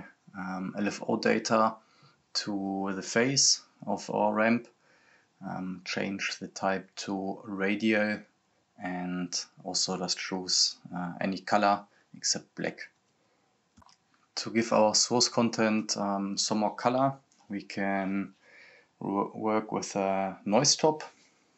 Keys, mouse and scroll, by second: 7.5-8.0 scroll down 1, 10.5-14.1 drag, 14.1 scroll up 1, 15.8 scroll down 1, 16.9 click, 17.4-17.8 scroll down 1, 18.9 click, 20.7-21.5 typing.